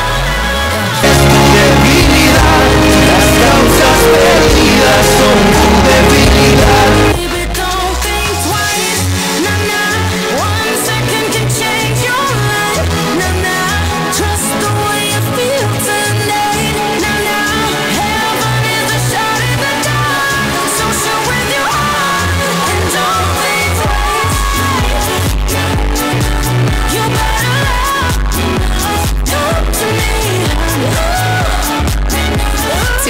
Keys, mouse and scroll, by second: 7.9 Page_Down.